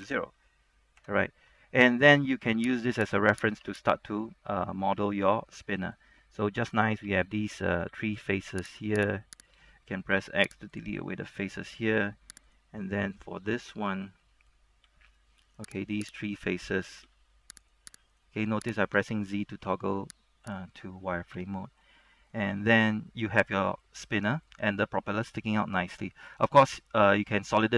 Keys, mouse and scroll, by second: 0.2 KP_0, 1.1 KP_Enter, 1.5-2.9 scroll up 1, 2.9 Tab, 3.2 right click, 3.7 Tab, 4.0 right click, 4.3 middle click, 5.1 Tab, 5.5 middle click, 6.3 scroll up 1, 6.5 shift+middle click, 8.0 z, 8.8 right click, 9.1 shift+right click, 10.3 shift+x, 10.9 click, 11.1-12.3 middle drag, 12.6 right click, 13.0 middle click, 15.0 z, 15.2 middle click, 16.1 shift+right click, 17.2 shift+z, 17.8 right click, 18.2 shift+right click, 18.9 shift+right click, 19.8 shift+x, 20.6 click, 21.5 Tab, 21.7 scroll down 1, 22.0 middle click, 22.6 z, 23.0 scroll down 1, 23.2 middle click, 24.1 middle click, 24.7 scroll down 1, 25.1 middle click, 25.9 scroll up 1, 26.1 middle click, 26.5 scroll up 1.